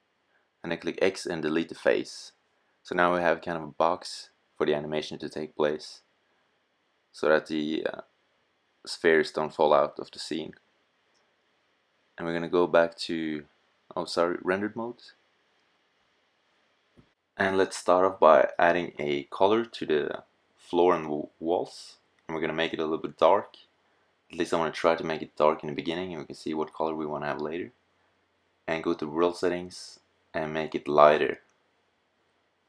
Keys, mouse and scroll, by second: 0.0 x, 7.7-9.0 middle drag, 15.3-16.7 middle drag, 18.9 middle click, 22.5 middle click, 24.6-25.6 middle drag, 26.0-27.7 middle drag, 27.7 click, 30.5 middle click.